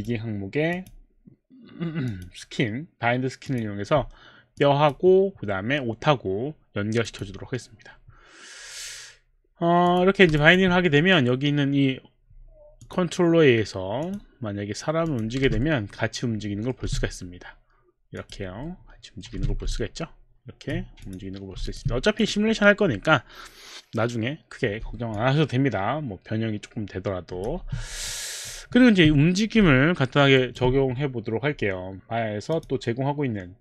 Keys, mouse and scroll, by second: 0.0 click, 0.7 click, 2.1 click, 3.5 click, 5.3 click, 7.1 click, 9.8 click, 10.4 alt+click, 11.1 alt+click, 12.8 click, 14.1 click, 15.1 click, 15.6 middle click, 15.6 click, 15.6 w, 16.2 middle click, 16.2 w, 16.8 z, 18.1 click, 18.5 click, 18.7 middle click, 19.3 z, 19.8 alt+click, 21.6 click, 22.2 alt+click, 25.1 alt+click, 26.0-27.4 alt+drag, 27.6 q, 28.1 alt+click, 28.7 alt+middle click, 30.0 alt+middle click, 30.3 alt+right click, 32.6 click.